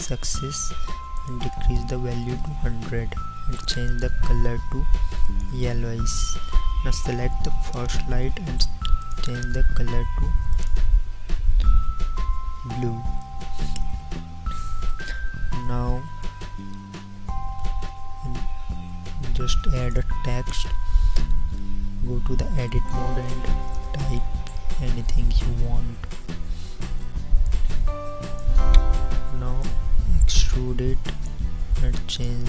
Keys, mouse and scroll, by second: 7.8-14.2 drag, 21.5 Tab, 23.0-25.1 typing, 26.1 Tab.